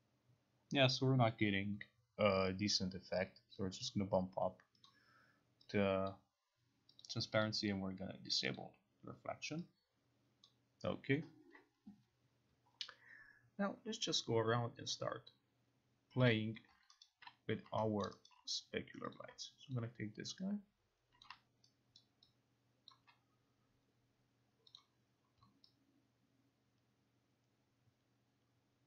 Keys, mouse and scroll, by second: 3.9 click, 4.9 click, 6.1 click, 7.1 click, 7.5 click, 8.6 click, 10.5 click, 16.3 click, 17.1 alt+right click, 18.1 alt+middle click, 18.4 alt+right click, 19.3 click, 19.9 alt+click, 21.3 click, 22.0 alt+right click, 23.0 alt+click, 24.9 click.